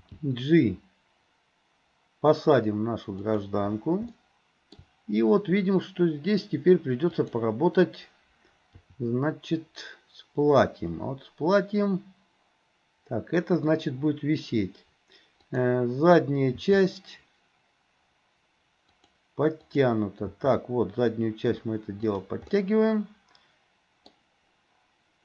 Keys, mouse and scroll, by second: 0.0 g, 4.2-5.6 shift+middle drag, 7.2 click, 8.8 r, 15.5 click, 16.6 r, 19.7 click, 20.3 r, 22.6-24.1 middle drag.